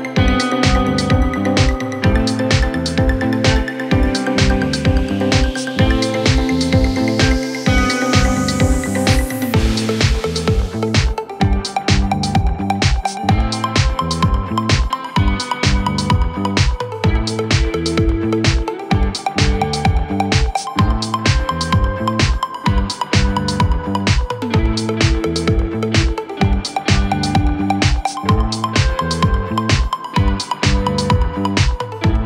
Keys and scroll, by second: 7.5 c, 8.3 ctrl+z, 10.0 d, 14.0 f, 19.8 c, 28.2 Caps_Lock, 29.6-31.4 typing.